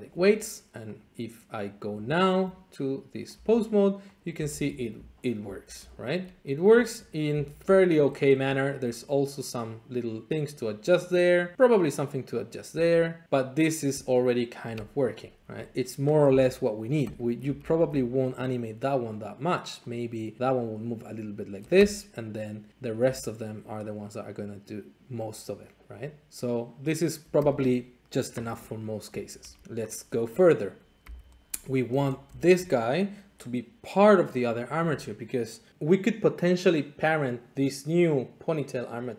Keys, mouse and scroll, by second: 0.9 click, 1.6 click, 2.0 Tab, 3.1 scroll, 3.3 r, 4.1 click, 4.5 alt+z, 5.4 alt+shift+z, 6.1-6.4 scroll, 7.3 r, 7.6 click, 8.0 shift+middle click, 8.1 scroll, 8.8 shift+middle click, 12.7 r, 14.8 Escape, 15.4 alt+r, 16.2 r, 17.0 Escape, 17.6 alt+shift+z, 18.3 click, 19.4 click, 19.9 click, 20.4 r, 21.7 Escape, 22.8 click, 23.0 r, 27.4 Escape, 29.0 shift+middle click, 29.5 alt+shift+z, 29.9 click, 31.1 g, 31.5 Escape, 32.0-32.5 shift+scroll.